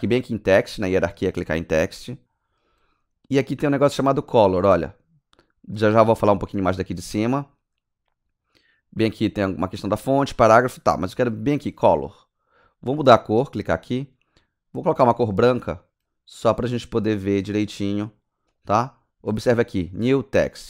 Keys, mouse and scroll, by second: 0.5 click, 1.8-2.8 scroll down 9, 4.4-5.0 scroll up 5, 7.1 scroll down 1, 7.2 Down, 7.4 Down, 7.4 Down, 7.7 Down, 7.7 Down, 13.5 click, 14.9 click, 18.5 click.